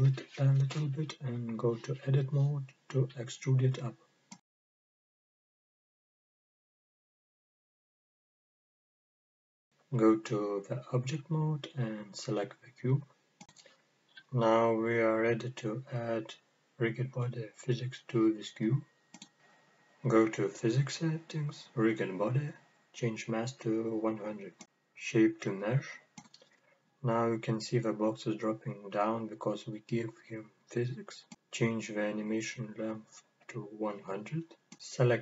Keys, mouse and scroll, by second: 0.9 click, 2.4-3.5 drag, 7.2 middle click, 7.8-9.6 scroll up 2, 9.6-9.9 scroll down 2, 9.9 middle click, 11.0 Tab, 11.7-12.5 scroll down 1, 12.5 click, 13.1 middle click, 14.5-18.9 middle drag, 18.9 click, 20.8-21.4 drag, 22.1-22.6 scroll down 1, 22.6-24.4 drag, 23.7 KP_0, 24.7-25.6 scroll down 1, 25.6-31.0 drag, 31.8-33.5 drag, 32.8 KP_0.